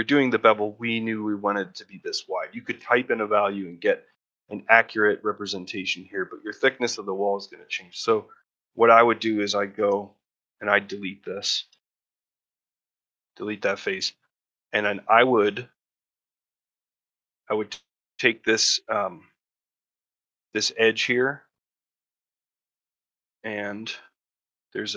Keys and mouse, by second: 3.2 middle click, 5.6 middle click, 7.3 middle click, 8.2 middle click, 9.6 3, 10.2 click, 10.6 middle click, 13.2 middle click, 13.7 shift+middle click, 15.4 shift+middle click, 15.8 ctrl+middle click, 16.0 shift+middle click, 17.5 shift+middle click, 18.5 middle click, 19.5 shift+middle click, 20.5 middle click, 21.6 middle click, 22.0 shift+middle click, 22.3 ctrl+middle click, 22.6 shift+middle click, 23.0 middle click, 23.3 shift+middle click, 23.6 middle click.